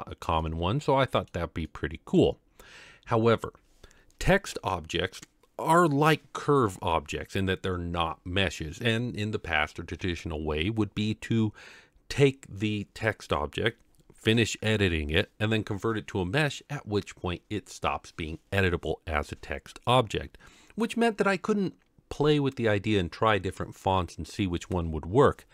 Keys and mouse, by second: 0.4-1.3 middle drag, 1.7-2.2 middle drag.